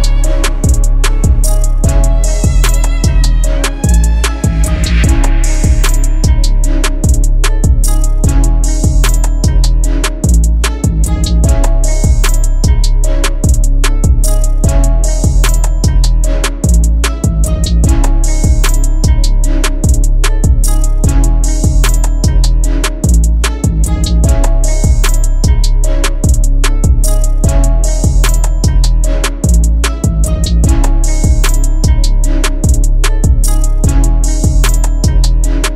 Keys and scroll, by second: 7.5 Delete, 8.6 shift+F2, 8.9 Escape, 16.7 KP_Add, 33.6 F3, 35.0 shift+F2, 35.5 Escape.